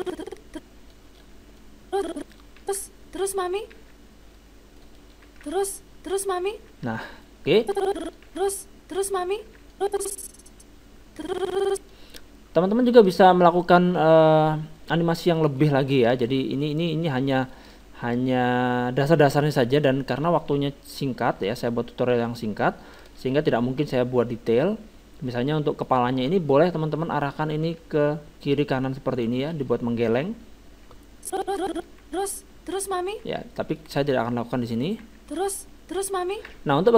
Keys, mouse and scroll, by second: 2.6 alt+a, 3.9 alt+a, 3.9-6.9 middle drag, 5.3 alt+a, 6.9 alt+a, 7.0 middle click, 7.6-9.4 drag, 8.3 alt+a, 9.6 alt+a, 9.7-11.4 drag, 12.2-15.1 middle drag, 14.8-15.2 scroll down 1, 15.2-17.5 middle drag, 20.0-21.0 middle drag, 20.2 KP_7, 27.8 r, 29.7-31.0 middle drag, 31.0-32.8 drag, 32.0 alt+a, 33.5 alt+a, 33.5-36.3 middle drag, 35.1 alt+a, 36.4 alt+a.